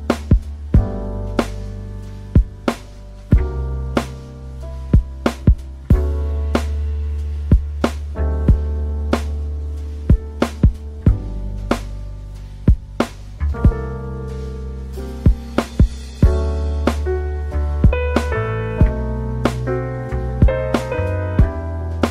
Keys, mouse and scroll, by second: 3.2-4.8 typing, 3.4 drag, 4.6 click, 17.0 alt+BackSpace, 21.3 alt+BackSpace.